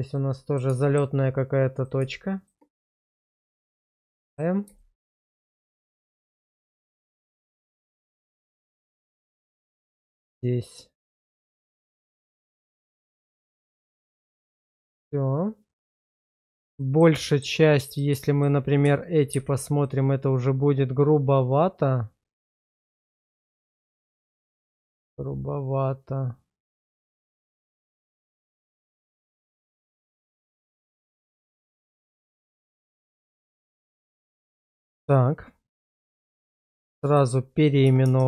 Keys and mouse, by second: 0.1 middle click, 0.8 shift+middle click, 2.7 1, 3.8 middle click, 4.8 shift+middle click, 5.3 middle click, 7.3 1, 7.6 middle click, 8.6 middle click, 9.5 click, 9.9 shift+click, 10.2 1, 11.4 middle click, 12.2 Tab, 12.7-14.0 middle drag, 14.2 Tab, 15.0-16.2 middle drag, 16.8 middle click, 17.2 middle click, 19.4 ctrl+x, 19.8-28.5 middle drag, 29.1 ctrl+z, 29.9 Tab, 30.4-31.1 middle drag, 31.3 shift+middle drag, 31.7-33.2 middle drag, 33.6 shift+middle drag, 34.1-34.8 middle drag, 36.5 shift+r, 38.0-38.2 typing.